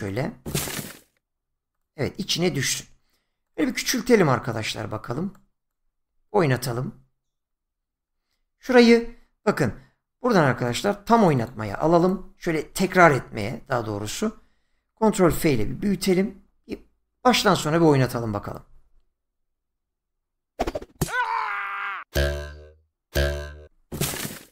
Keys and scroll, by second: 9.6 <, 15.7 ctrl+f.